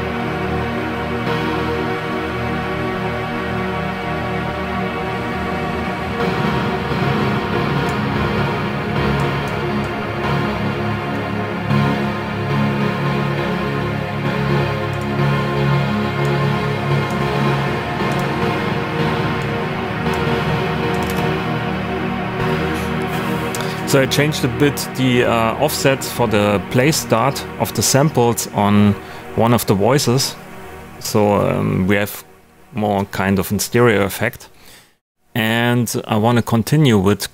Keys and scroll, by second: 21.0 space.